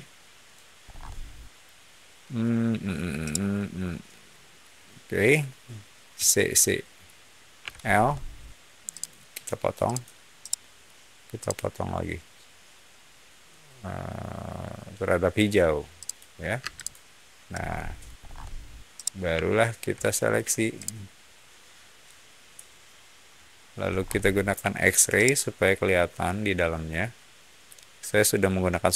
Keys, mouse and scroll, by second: 0.7 scroll up 1, 3.2-4.5 shift+middle drag, 6.1 shift+middle click, 7.5 l, 7.8 scroll up 1, 8.8 click, 9.8 click, 10.3 middle click, 11.3 click, 15.9 click, 16.5 space, 16.7 click, 17.4 middle click, 18.1 scroll down 1, 18.9-19.9 middle drag, 20.7-21.9 shift+drag, 23.8 scroll up 1, 24.5 x, 25.1-28.0 middle drag.